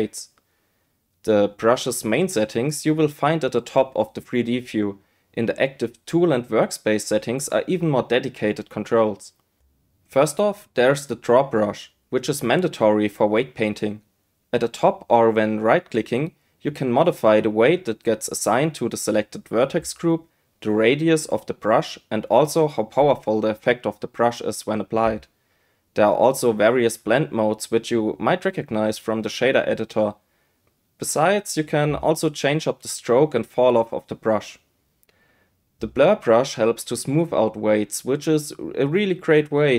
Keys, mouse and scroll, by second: 6.1 click, 15.9-26.0 right drag, 28.8-36.6 drag, 38.7 click.